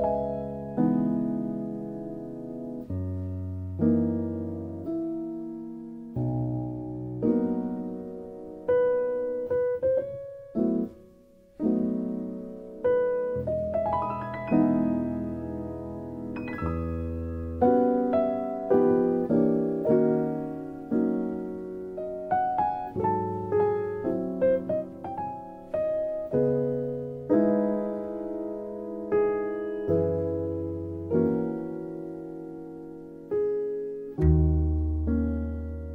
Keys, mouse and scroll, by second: 2.0 click, 2.6 click, 5.0 click, 5.5 click, 6.2 click, 6.7-8.1 drag, 8.7 g, 10.3 click, 10.6 g, 11.2 click, 11.6-12.7 drag, 12.8 click, 13.0 Tab, 13.4 middle click, 14.1 click, 14.3 alt+z, 15.1 ctrl+s, 15.5 click, 15.8 Tab, 16.1 middle click, 17.2 click, 17.8 Tab, 17.9 right click, 18.7 middle click, 19.8 click, 20.1 Tab, 20.4 middle click, 21.8 ctrl+r, 23.8 KP_1, 24.0 Tab, 24.3 alt+z, 25.3 Tab, 25.3 alt+z, 25.7 alt+z, 28.5 Tab, 29.0 alt+z, 29.4-30.1 middle drag, 30.4-31.3 middle drag, 32.6 click, 33.2 KP_1.